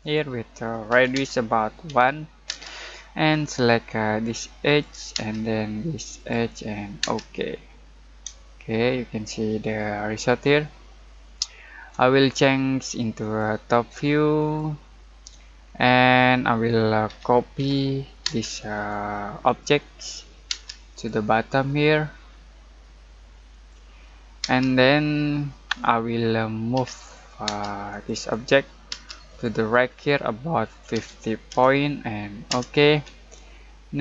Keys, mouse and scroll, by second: 0.0 click, 0.9 r, 1.1 space, 1.8 1, 2.4 space, 3.3-4.4 scroll up 1, 4.6 click, 5.1 space, 6.1 click, 7.0 space, 7.6-8.2 scroll down 1, 8.4-13.2 shift+middle drag, 13.2 click, 15.7-16.3 scroll down 1, 16.3 middle click, 17.1-18.2 typing, 18.7 click, 19.9 middle click, 20.5 space, 20.9 click, 23.5 click, 24.4 space, 25.9 middle click, 26.7 m, 27.4 space, 27.9 click, 28.9 space, 29.2 click, 30.9-31.5 typing, 32.4 Return, 33.8-34.0 scroll up 1.